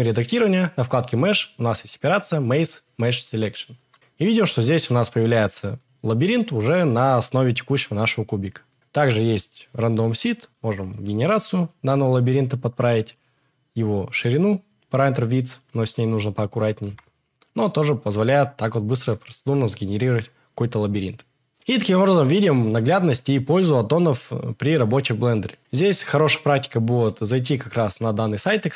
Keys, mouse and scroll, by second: 0.5-3.3 drag, 9.5 click, 9.9 click, 10.4 click, 10.8 click, 11.1 click, 11.6 click, 13.1-15.6 drag.